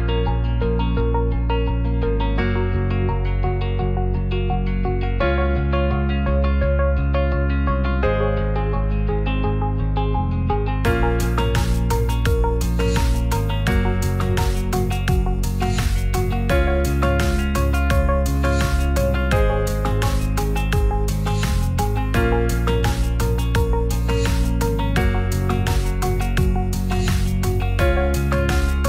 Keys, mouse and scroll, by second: 0.1 alt+middle click, 0.4-0.8 alt+middle drag, 2.6-6.3 drag, 6.3 middle drag, 7.4 right click, 7.9 right click, 8.3 click, 8.7 shift+middle click, 9.0 shift+a, 10.1 g, 10.2 z, 10.6-11.0 drag, 11.0 middle click, 11.4 shift+middle click, 11.6 middle drag, 12.3 click, 13.9-14.4 middle drag, 15.7 ctrl+a, 16.2 Tab, 16.6 ctrl+r, 18.6 right click, 19.6 click, 21.4 middle click, 23.8 2, 24.0 click, 25.4-26.2 drag, 27.3 KP_0.